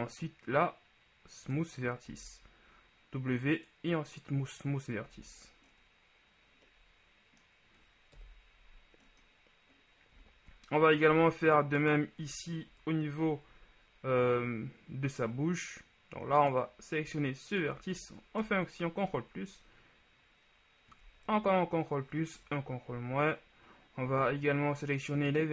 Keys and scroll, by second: 2.3 w, 5.3 Tab, 8.3 KP_1, 11.2 shift+Tab, 12.9 ctrl+KP_Add, 18.6 ctrl+shift+KP_Add, 21.5 ctrl+KP_Add, 22.5 ctrl+KP_Subtract.